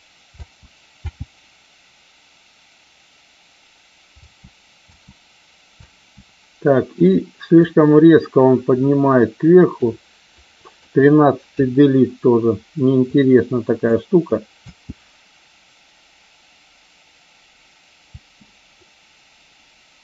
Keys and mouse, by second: 0.3 space, 0.9 space, 4.2 space, 4.9 space, 5.7 space, 6.9 click, 7.5-9.8 drag, 10.4 click, 11.5 Delete, 13.0-13.9 drag, 14.5 space, 18.0 space.